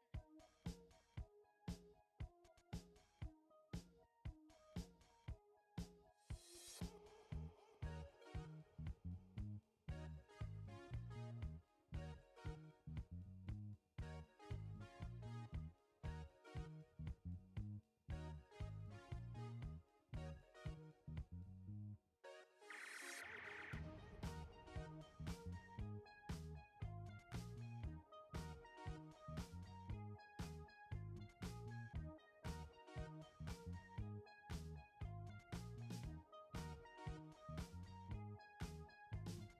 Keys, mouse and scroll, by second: 2.4-22.0 drag, 22.5 ctrl+t, 26.8 shift+Num_Lock, 26.8-34.5 shift+drag, 37.2-39.5 drag.